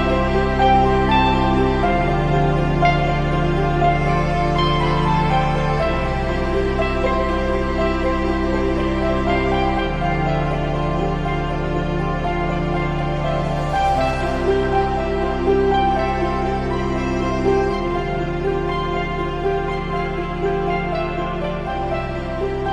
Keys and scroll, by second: 0.6 Return, 3.5 b, 7.6 1, 9.8 r.